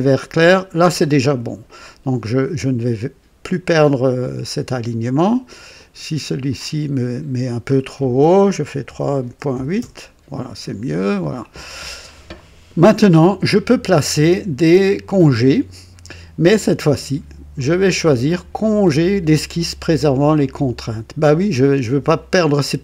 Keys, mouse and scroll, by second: 5.7 click, 6.2 click, 8.8 KP_3, 9.2 KP_Decimal, 9.5 KP_8, 9.7 KP_Enter, 11.9 scroll down 1, 17.5 click.